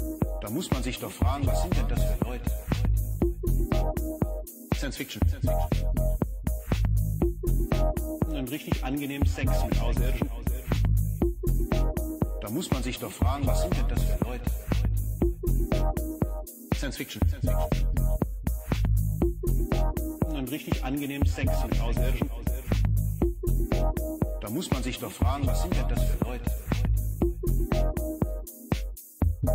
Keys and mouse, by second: 0.4 shift+a, 4.9 click, 10.2-12.9 drag, 17.4-20.4 drag, 21.7-27.9 drag, 23.9 0, 29.2-29.5 drag.